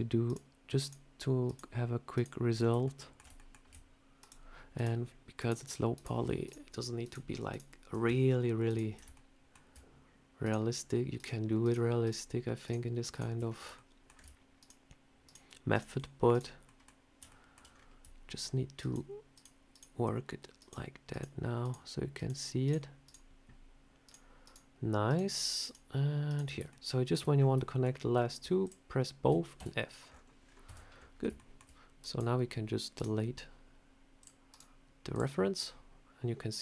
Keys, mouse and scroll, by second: 2.7 ctrl+right click, 2.7 ctrl+middle click, 3.2 shift+middle click, 4.1-9.0 ctrl+right click, 9.0 shift+middle click, 10.3 ctrl+right click, 13.6 ctrl+right click, 13.6 shift+middle click, 14.4 ctrl+right click, 16.5 ctrl+middle click, 17.1 ctrl+middle click, 17.5 scroll down 5, 18.6 ctrl+right click, 20.8-25.0 ctrl+right click, 26.5 ctrl+right click, 26.5 shift+middle click, 27.2 scroll up 4, 27.5 shift+middle click, 28.5 shift+click, 29.4 f, 29.9-30.4 scroll down 9, 30.5 Tab, 30.8 scroll up 2, 31.2 shift+middle click, 32.8 right click, 34.0 click, 34.4 right click, 35.4 scroll down 3.